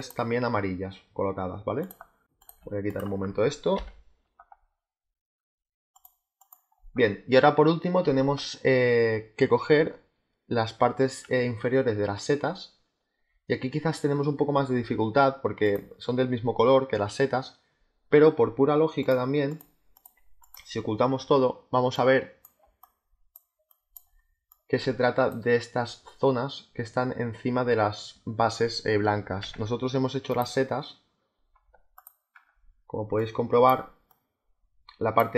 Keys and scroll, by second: 3.6 Delete, 15.7 space, 22.5 space.